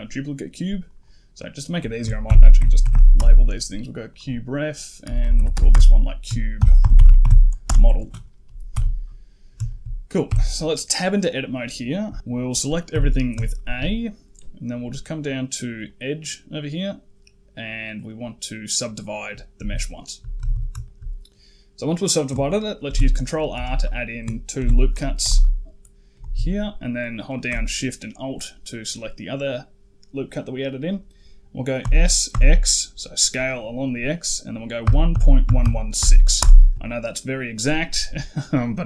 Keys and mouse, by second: 0.8-3.0 drag, 3.9 click, 4.1-7.5 drag, 5.2 BackSpace, 5.4 BackSpace, 8.6 KP_1, 9.5 shift+middle drag, 10.1 Tab, 12.8 a, 13.4 shift+middle click, 15.7-19.1 drag, 19.8 shift+middle click, 20.2 a, 20.4 a, 20.7 shift+middle click, 22.7 ctrl+r, 24.4 ctrl+r, 27.1 alt+shift+click, 31.7 s.